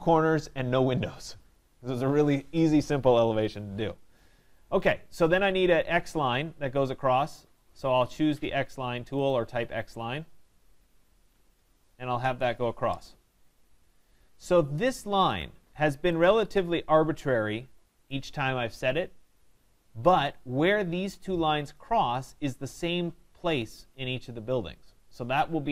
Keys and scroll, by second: 12.2 Return.